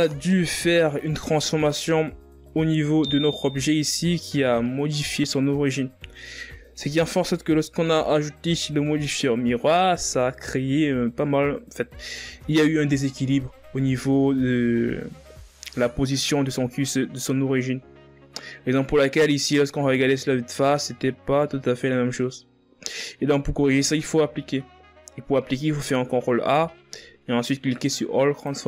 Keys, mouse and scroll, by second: 0.6-2.4 scroll up 3, 2.4 right click, 5.0-5.4 scroll down 1, 5.6-8.7 shift+scroll up 3, 19.2-22.4 shift+scroll up 2, 24.8-27.9 scroll down 1.